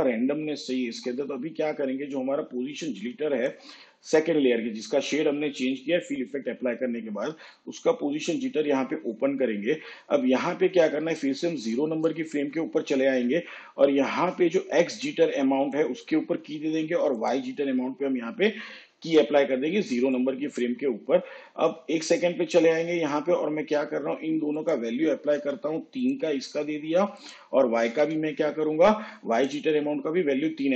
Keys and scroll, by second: 25.5 3, 28.1 3.